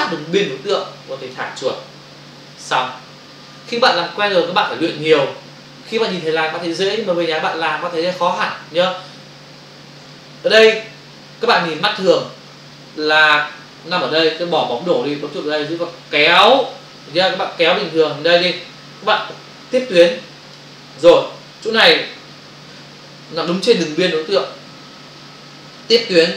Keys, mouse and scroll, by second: 10.0 space, 15.6 click.